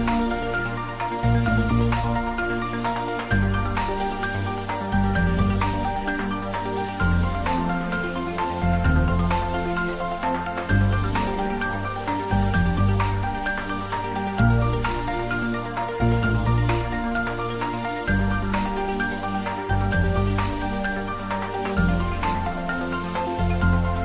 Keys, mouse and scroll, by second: 0.1-1.9 middle drag, 2.8 click, 5.0 typing, 6.2-7.0 typing, 7.4 Return, 8.2-10.2 scroll up 1, 10.5-13.3 middle drag, 13.5-14.7 scroll up 1, 14.7 Tab, 15.2 click, 16.7 ctrl+z, 18.3 click, 22.8 click.